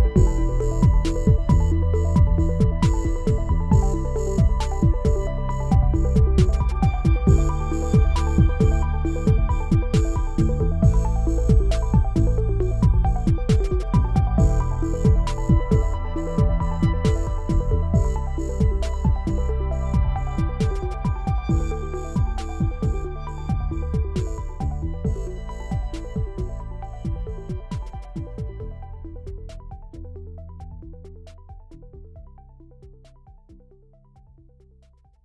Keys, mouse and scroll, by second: 0.0 click, 0.5 scroll down 2, 0.7 click, 0.8 shift+a, 3.5-4.5 drag, 4.5 middle drag, 4.7 click, 4.8 shift+a, 6.9-8.5 drag, 8.5-8.9 middle drag, 8.9 click, 9.2 middle click, 9.6 click, 9.7 shift+d, 11.1 middle click, 11.5 click, 13.4-14.1 drag, 14.6 scroll down 1, 14.7 middle click, 15.2 click, 15.7 middle click, 15.9 scroll down 2, 16.0 click, 16.1 shift+a, 18.6 scroll up 5, 18.8 middle click, 19.1 click, 19.2 shift+a, 21.2-23.5 drag, 23.5 shift+d, 25.0-26.3 drag, 26.3 middle click, 26.5-26.8 scroll down 1, 27.5-29.0 drag, 29.4-34.7 drag, 34.7-35.2 scroll down 2.